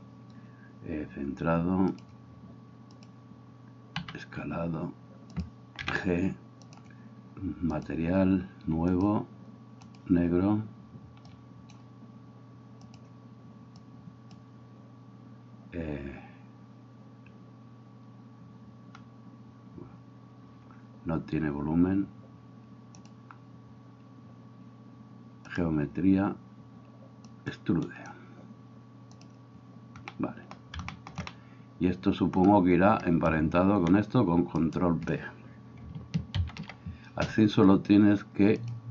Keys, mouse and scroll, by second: 4.1 s, 5.4-7.8 middle drag, 5.9 g, 7.8-8.8 drag, 8.8 middle click, 8.9-10.3 drag, 10.3-12.9 middle drag, 12.9-15.3 drag, 15.3-23.0 middle drag, 23.0-28.1 drag, 28.1-29.2 middle drag, 29.2-38.9 drag, 34.6 shift+middle click, 34.6 shift+right click, 36.4 ctrl+p.